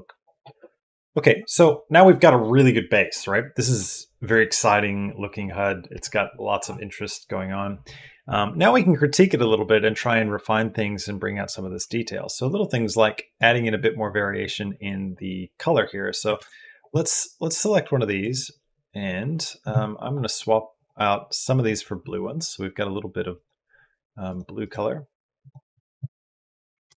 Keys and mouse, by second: 13.1 click, 16.2 ctrl+space, 18.1 click, 20.6 click, 23.1 click, 24.4 click, 26.7 ctrl+space.